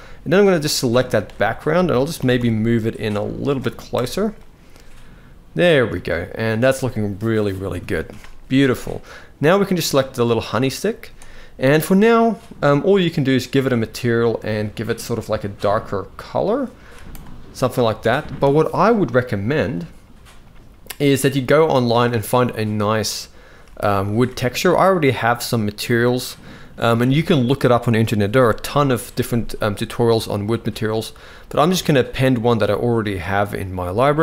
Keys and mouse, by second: 0.5 middle drag, 1.8 g, 3.6 KP_0, 5.7 shift+middle click, 7.5 ctrl+s, 7.7 ctrl+s, 9.4 click, 10.6 z, 16.5 z, 17.5 alt+a, 19.4 click, 23.2 z, 24.1 ctrl+s, 25.5-28.9 drag, 30.2-32.2 drag.